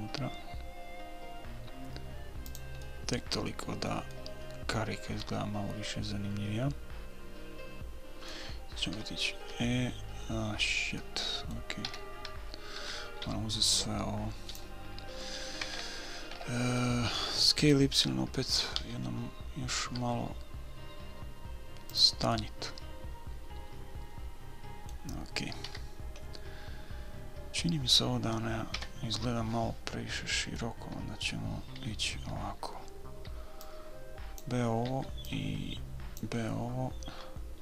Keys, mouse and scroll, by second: 3.2-6.4 middle drag, 6.5-8.6 middle drag, 9.3 a, 9.8 a, 11.3-13.2 middle drag, 12.2 a, 13.6 b, 16.0 KP_1, 16.7 KP_3, 19.1 s, 22.7-24.7 middle drag, 26.0 a, 29.1 KP_1, 30.6 middle click, 32.2 b, 35.3 b.